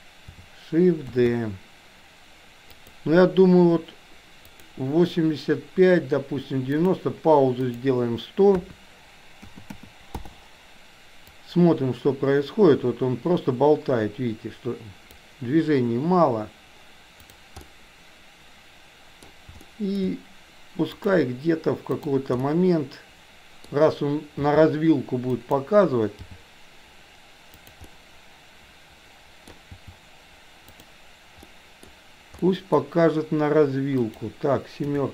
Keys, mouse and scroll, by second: 1.0 shift+d, 4.5 click, 6.8 click, 7.5-10.3 drag, 9.6 KP_0, 11.3-15.1 drag, 17.6-19.3 middle drag, 19.6-20.0 shift+middle drag, 20.9 click, 21.9 click, 22.4-23.8 middle drag, 24.4 r, 26.1 g, 27.9-29.5 middle drag, 29.6 g, 31.4 middle click, 32.4 middle click, 34.0 click, 34.9 KP_7.